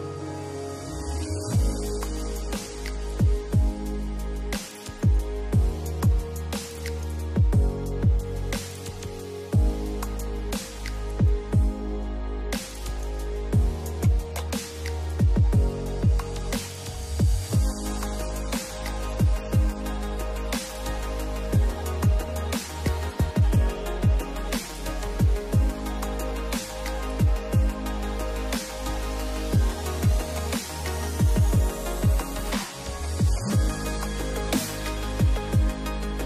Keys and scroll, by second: 0.8 Delete, 1.6 space, 7.5 space, 26.4 space.